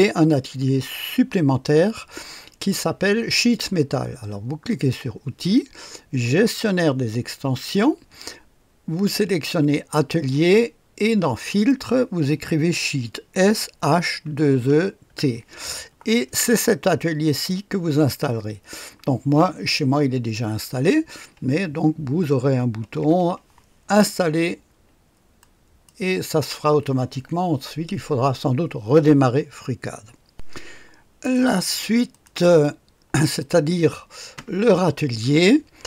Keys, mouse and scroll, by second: 4.6 click, 6.6 click, 9.1-10.4 drag, 11.4 click, 13.1-15.5 typing, 17.2 click, 25.3 click, 26.2 click, 30.3 click, 31.3 click, 31.7 space, 32.1 click, 32.4 space, 33.3 click, 35.3-35.8 scroll down 1, 35.3 space.